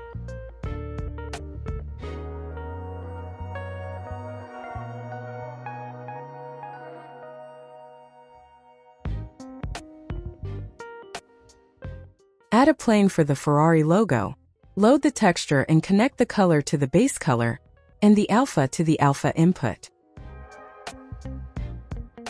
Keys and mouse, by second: 1.4 g, 1.6 click, 4.3 g, 4.8 z, 7.1 click, 8.0-9.4 drag, 10.8 click, 11.6 ctrl+t, 12.7 click, 17.1 click.